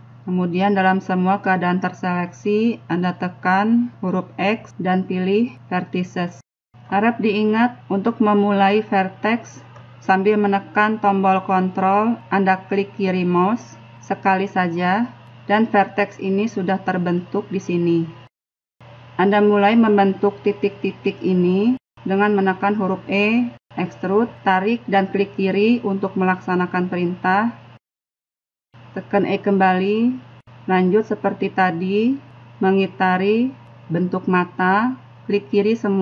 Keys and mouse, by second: 3.3 x, 7.9-9.8 middle drag, 16.3-18.0 drag, 18.0-28.5 middle drag, 28.5 e, 30.9-35.5 typing.